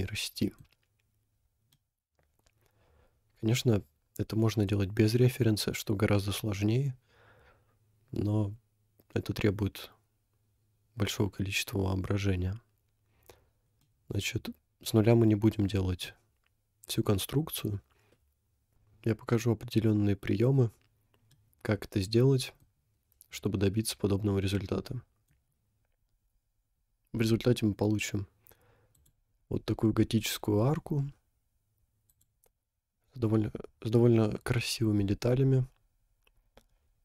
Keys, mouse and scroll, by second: 1.3 scroll up 2, 1.7 middle click, 3.0-4.4 middle drag, 13.9-16.0 middle drag, 21.4-22.6 middle drag, 24.6 middle click, 25.8 scroll down 1, 29.0 click, 30.2 scroll down 2, 32.1 click, 34.5-35.0 scroll up 3, 35.5 scroll up 4, 36.8-37.0 scroll up 2.